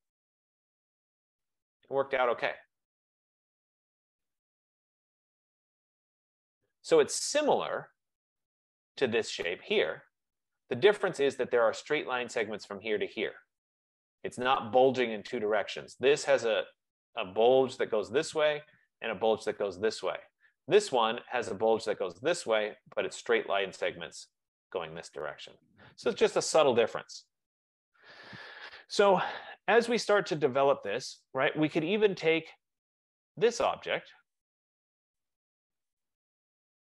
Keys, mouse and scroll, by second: 0.1 Return, 0.1 typing, 0.7-5.9 drag, 6.0 F15, 8.5 click, 9.7 click, 10.8 click, 33.3 click, 34.3 shift+click.